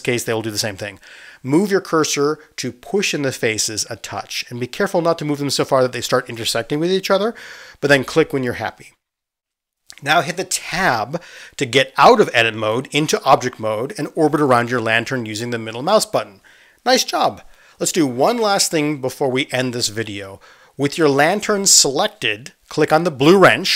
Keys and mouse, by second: 12.7 Tab.